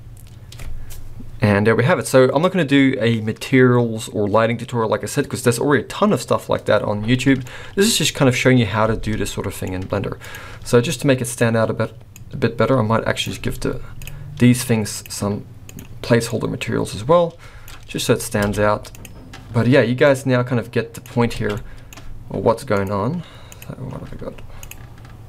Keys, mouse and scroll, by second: 0.0 space, 7.4 middle click, 7.4-8.8 scroll up 1, 8.8 space, 9.2 middle click, 9.7-10.2 scroll up 1, 10.2 click, 11.2 click, 13.9 click, 14.9 click, 15.7 click, 17.9-18.4 scroll down 3, 18.4 alt+a, 18.9 click, 20.0 click, 21.3 alt+a, 21.5 middle click, 22.7 click, 24.5 click.